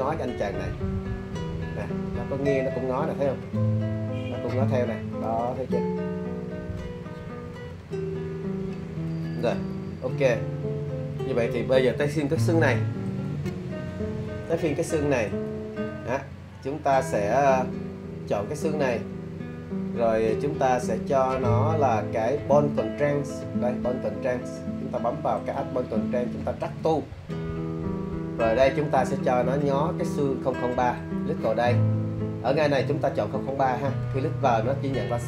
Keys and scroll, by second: 10.9 super+z.